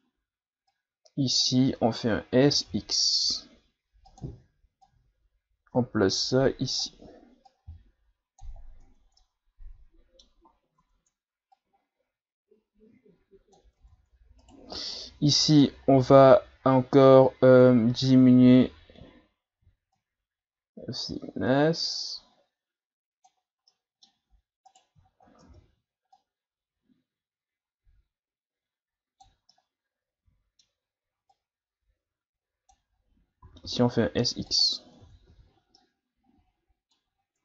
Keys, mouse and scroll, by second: 0.0-0.7 scroll up 3, 0.7-1.8 drag, 1.8-2.5 scroll up 1, 2.5 s, 4.8-8.8 drag, 8.8 Tab, 9.2-10.4 middle drag, 10.4-10.8 scroll up 4, 10.8 Tab, 11.6-13.8 drag, 13.8 Tab, 14.4 right click, 15.5 click, 17.2-18.1 scroll down 2, 18.6-20.0 scroll down 6, 20.0-22.9 shift+drag, 23.7-24.7 middle drag, 24.7 right click, 25.0-25.4 shift+scroll up 2, 25.4 Tab, 26.2-29.1 drag, 29.5-31.3 middle drag, 31.3 click, 33.4 s, 35.0 Tab, 35.3 a, 35.5 scroll down 4, 35.8-37.2 middle drag, 37.2-37.4 ctrl+scroll up 6.